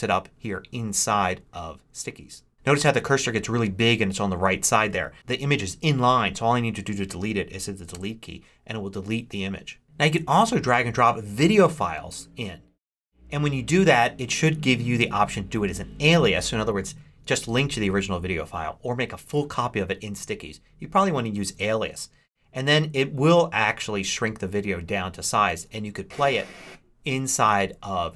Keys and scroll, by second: 7.8 BackSpace.